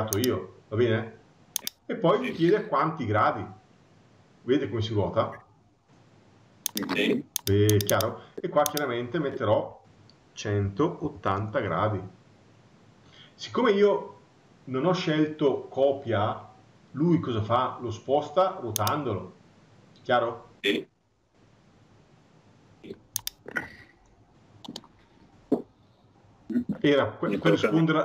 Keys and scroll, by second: 11.7 Return.